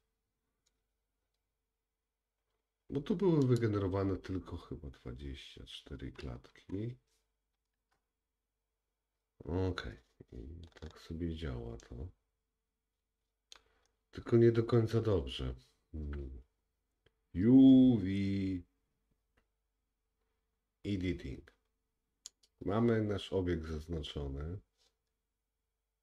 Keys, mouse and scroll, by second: 3.5-22.4 drag, 10.8-11.8 scroll up 3, 11.8 middle click, 11.8 scroll up 1, 14.0-14.8 scroll down 2, 22.6 click, 22.9 middle click, 25.7-26.0 scroll down 2.